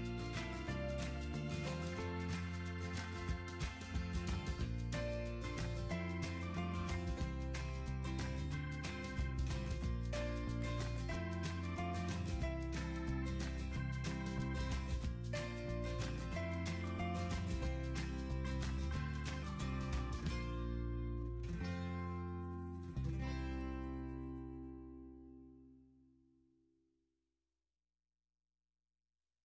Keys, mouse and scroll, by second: 1.1 click, 2.5 click, 4.6 click, 6.6 click, 10.2 click, 10.6 click, 11.1 middle click, 11.2 middle click, 11.3 middle click, 11.7-13.0 scroll, 13.0 scroll, 14.7-15.6 scroll, 15.6-16.0 scroll, 16.9 scroll, 18.3-19.6 middle drag.